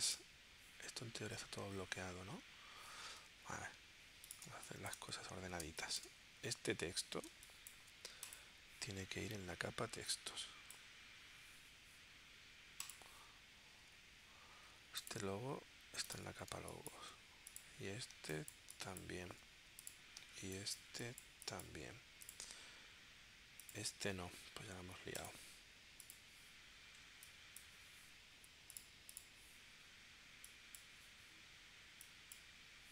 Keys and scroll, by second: 4.5 space, 5.6 space, 7.3 space, 16.6 space, 18.2 space, 20.2 space.